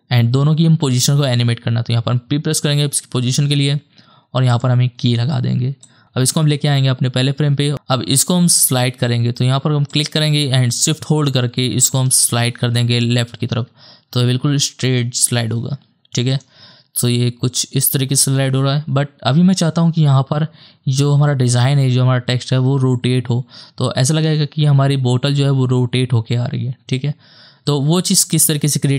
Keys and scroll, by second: 0.8 p, 16.7 KP_0, 18.4 space.